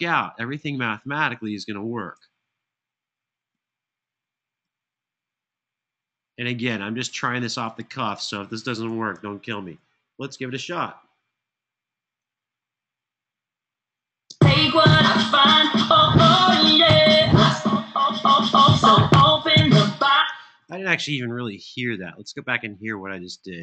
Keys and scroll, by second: 1.9 BackSpace, 3.3 BackSpace, 4.4 BackSpace, 5.8 BackSpace, 7.4 BackSpace, 8.8 super+[, 9.2 super+[, 13.9 space, 19.9 space.